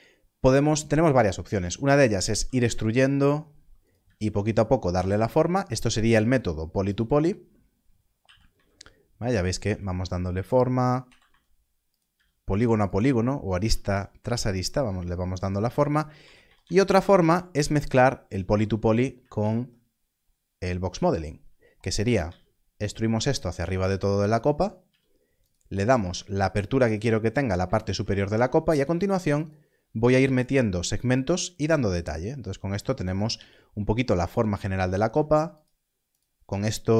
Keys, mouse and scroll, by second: 3.8 click, 6.8 click, 9.4 click, 10.4 click, 11.2 z, 11.9 click, 12.8 click, 14.5 click, 14.7 s, 15.3 click, 16.1 ctrl+z, 16.4-17.4 ctrl+z, 19.3 ctrl+z, 20.2 scroll up 1, 24.3 click, 24.8 s, 25.4 click, 25.8 s, 26.8 click, 27.3 scroll down 1, 28.6 ctrl+r, 29.3 click, 31.1 click, 33.0 click, 33.3 z, 34.1 click, 34.9 ctrl+r, 35.5 click, 36.4 s.